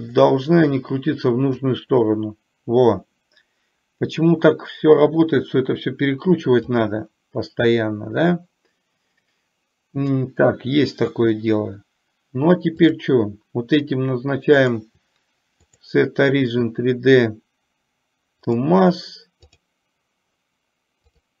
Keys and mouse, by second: 1.8-6.8 drag, 13.0 click, 14.6-18.8 drag, 19.6 click, 21.2-21.4 drag.